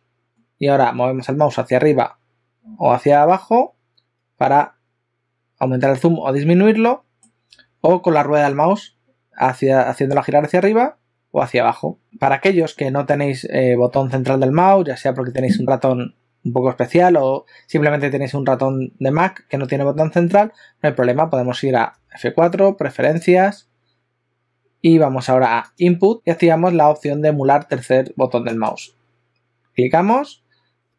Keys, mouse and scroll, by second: 0.3 ctrl+middle click, 9.7-10.7 scroll up 4, 10.7-11.4 scroll down 6, 11.7-12.0 scroll up 2, 12.0-13.5 scroll down 1, 22.0 F4.